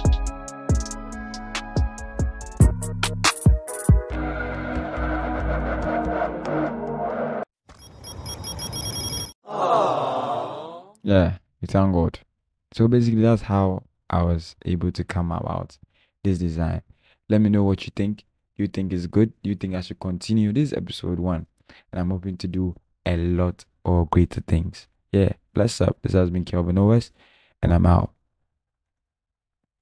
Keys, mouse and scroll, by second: 1.5 scroll down 1, 3.4 double click, 4.9 alt+scroll up 1, 5.1 alt+double click, 5.1 alt+click, 5.2 double click, 6.4 double click, 10.8 double click, 11.1 shift+click, 11.6 double click, 11.9 right click, 12.1 double click, 12.3 double click, 12.7 double click, 13.7 double click, 14.1 double click, 14.8 double click, 14.9 scroll down 1, 15.2 double click, 15.5 alt+double click, 16.6 alt+click, 17.1 double click, 17.4 shift+double click, 17.5 double click, 17.7 alt+click, 17.8 scroll down 1, 17.9-18.4 alt+scroll up 3, 18.0 shift+click, 18.3 shift+click, 18.4 alt+click, 18.5-18.9 scroll down 2, 18.7 double click, 18.9 alt+double click, 19.4 double click, 19.7 double click, 20.0 scroll down 1, 20.1 double click, 20.4 double click, 20.6 double click, 20.8 double click, 21.0 double click, 21.2 double click, 21.4 alt+scroll down 1, 21.6 alt+scroll up 1, 22.0 double click, 22.3-22.8 alt+scroll down 3, 22.6 double click, 22.9 double click, 23.6-24.0 scroll up 2, 24.4 double click, 24.8 double click, 25.2 alt+scroll down 1, 25.3 double click, 26.0 double click, 26.3 double click, 26.9 double click, 27.0 scroll down 1, 27.2 double click.